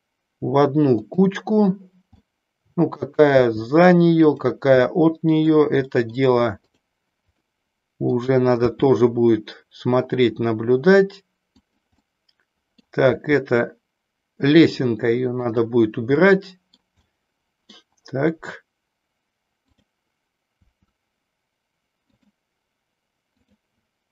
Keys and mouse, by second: 1.1 click, 2.2-3.2 middle drag, 3.5 r, 4.5 click, 5.0 middle click, 6.0 middle click, 6.6 click, 7.5 middle click, 8.6 r, 12.2-13.0 middle drag, 13.2 r, 15.6 drag, 16.2-17.0 middle drag, 17.1 middle click, 20.7 r, 22.2 click.